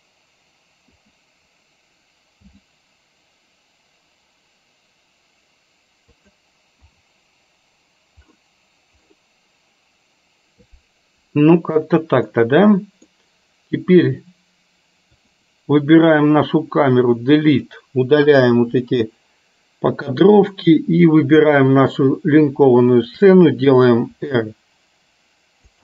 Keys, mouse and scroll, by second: 1.0 KP_0, 2.6 g, 6.8 KP_0, 12.5 middle click, 15.3 click, 16.6-17.8 drag, 18.6 Delete, 23.0 shift+click, 24.3 r.